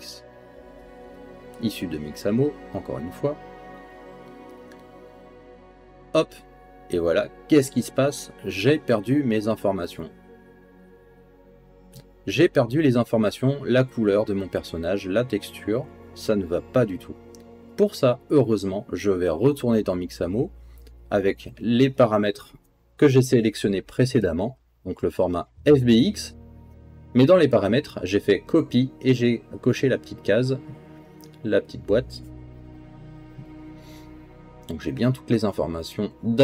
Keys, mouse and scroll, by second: 9.6 click, 12.0-13.3 drag, 14.5 click, 15.9 click, 21.4 click, 22.4 middle click, 24.5 click, 25.9 space, 28.0 click, 28.0 middle click, 28.0 right click, 31.2 space, 32.3 click, 33.3 space, 34.5 space.